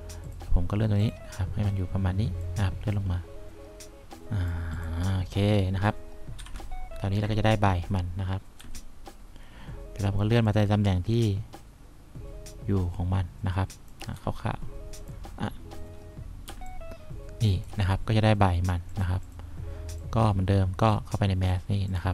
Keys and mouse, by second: 6.7 F1, 9.0 F3, 14.5 F1, 16.8 3.